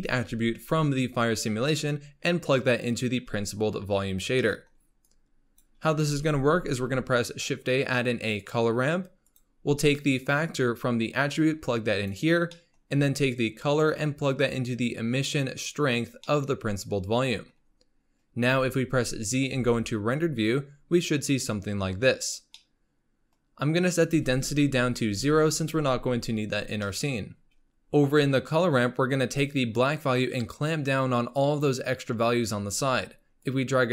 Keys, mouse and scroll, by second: 4.2 scroll down 1, 4.4 middle click, 5.0-6.1 drag, 6.1 shift+a, 10.2-12.5 drag, 12.5 middle click, 12.8-13.6 scroll up 2, 13.6-16.2 drag, 16.2-18.5 middle drag, 18.5 z, 22.7-24.2 middle drag, 24.2-25.8 drag, 26.9 middle click, 29.8-33.9 drag.